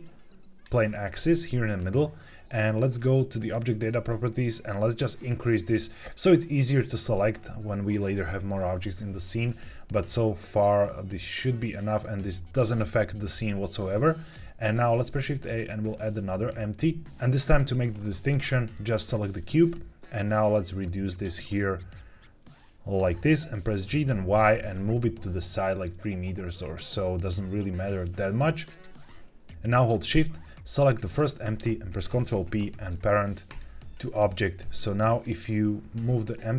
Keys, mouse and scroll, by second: 1.7 scroll down 1, 3.3 click, 4.6-7.9 drag, 10.3-12.0 drag, 14.8 shift+a, 20.1-22.9 drag, 23.8 g, 24.0 y, 28.4 click, 31.0 shift+click, 32.0 ctrl+p, 35.0 click.